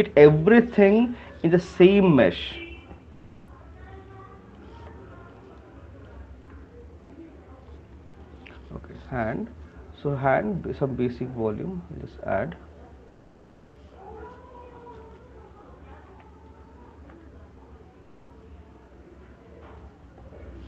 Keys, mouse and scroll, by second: 3.4 click, 4.9 alt+click, 6.3 alt+click, 10.5 click, 12.0 click, 12.4 click, 13.2 click, 13.6 click, 14.5 click, 17.0 right click, 17.7-18.3 alt+click, 20.0 click.